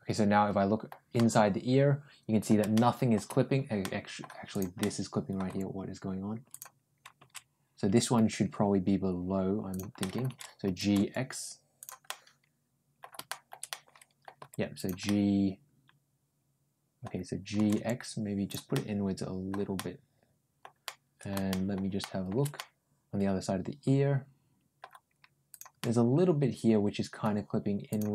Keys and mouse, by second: 1.0-2.3 middle drag, 2.6 shift+middle click, 3.7 middle click, 4.4 click, 4.6 middle click, 5.3 g, 8.0 ctrl+g, 9.8 middle click, 11.9 middle click, 13.1 middle click, 13.5 middle click, 14.2 g, 14.9 middle click, 15.8-16.9 middle drag, 17.4 g, 18.6 middle click, 19.6 middle click, 20.7 middle click, 21.3 shift+middle click, 21.8 shift+middle click, 22.4-24.6 middle drag, 25.3 click, 25.6-27.0 middle drag, 27.7 click, 28.0 g.